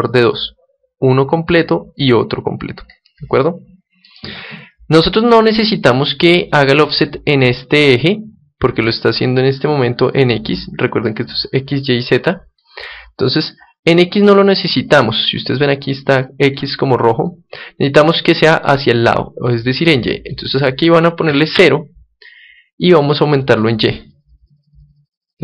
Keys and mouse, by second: 3.4-10.6 middle drag, 20.2-22.1 drag, 23.3-25.4 drag.